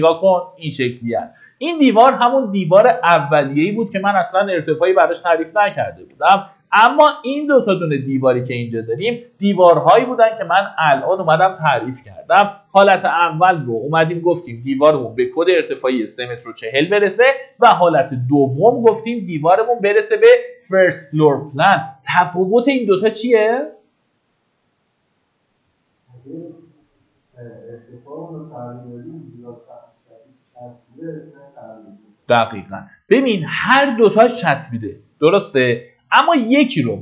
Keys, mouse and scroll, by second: 5.0 click, 5.9 Delete, 6.9-8.0 drag, 9.3 middle click, 10.0 Escape, 10.6 scroll up 1, 12.2 click, 15.3-16.4 scroll down 1, 17.6 click.